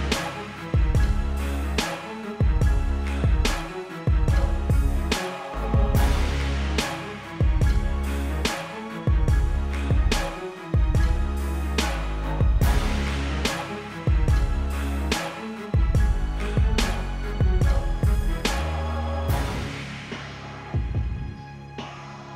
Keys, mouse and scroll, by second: 0.7 click, 1.0 click, 1.2 scroll down 1, 2.4 click, 3.7 scroll down 1, 4.9 scroll down 1, 5.7 scroll up 1, 6.5 click, 8.8 click, 10.5-11.3 typing, 11.0 click, 13.5 click, 14.2 v, 15.0 click, 16.4 alt+click, 17.9 click, 19.1 click, 19.7 click, 20.9 ctrl+c, 21.6 click.